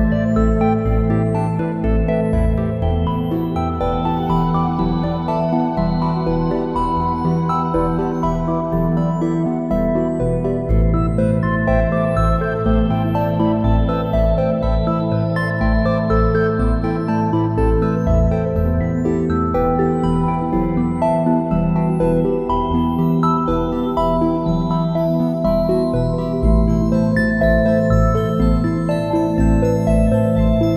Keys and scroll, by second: 0.8 space, 6.1 space, 15.9 space, 19.4 a, 23.3 space, 24.2 space, 27.9 space.